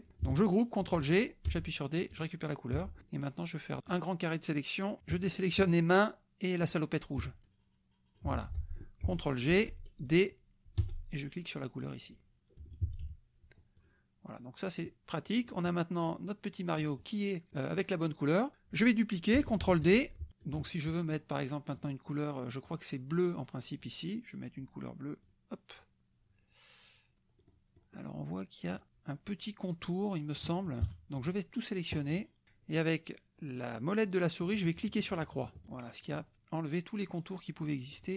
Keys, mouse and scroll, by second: 1.0 ctrl+g, 1.5 d, 2.1 click, 2.7 F1, 3.1-4.5 drag, 5.6 shift+click, 6.6 shift+click, 7.4-8.5 shift+drag, 8.3 ctrl+z, 9.5 ctrl+g, 10.8 d, 11.8 click, 12.6 F1, 12.8 KP_Subtract, 13.8 click, 14.6-15.7 drag, 16.1-17.2 drag, 17.5 middle click, 18.5 middle click, 19.6 ctrl+d, 20.2 ctrl+click, 20.8 ctrl+click, 20.9 ctrl+middle click, 21.4 ctrl+click, 22.0 ctrl+click, 22.6 click, 25.2 click, 27.4 click, 28.7 click, 28.8 ctrl+z, 30.8 KP_Subtract, 32.1 click, 36.2 click, 37.6 click.